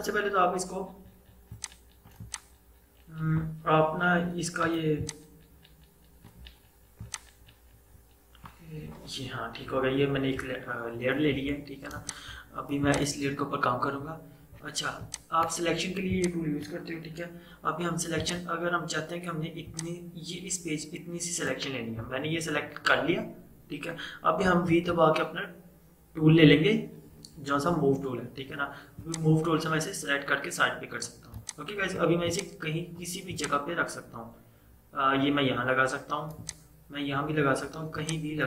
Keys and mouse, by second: 1.6-11.0 drag, 12.1-24.0 drag, 24.8 v, 29.1-38.0 drag, 38.3-38.4 drag.